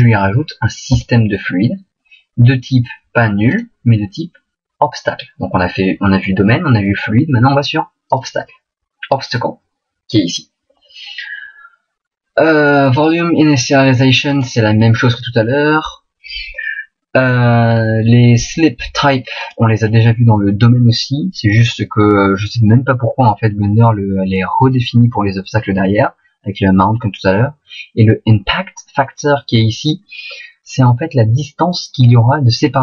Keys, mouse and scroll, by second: 32.7 middle click.